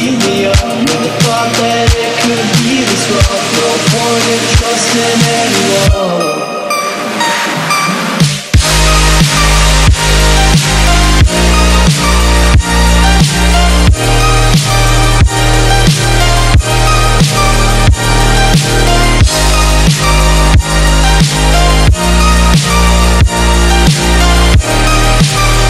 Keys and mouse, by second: 1.9 click, 2.1 space, 2.3 click, 2.8 ctrl+-, 3.0 click, 3.0 space, 3.2 space, 4.6 click, 5.8 right click, 6.3-10.2 drag, 10.8 right click, 11.4 click, 12.9 ctrl+-, 13.9 click, 14.1 space, 14.3 click, 14.4 space, 15.5 click, 24.4 click.